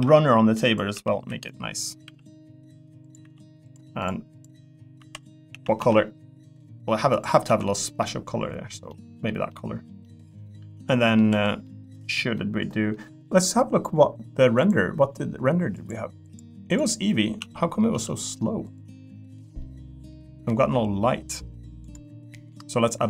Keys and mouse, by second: 0.0-2.0 typing, 3.2 e, 5.0 l, 5.5 a, 5.7 g, 7.1 click, 7.4 Tab, 8.0 middle click, 8.9 middle click, 9.5 middle click, 10.0-11.1 middle drag, 11.3 3, 11.6 middle click, 12.4 middle click, 14.6 click, 17.4 z, 17.9 z, 19.6 middle click, 21.8 click, 22.3 middle click.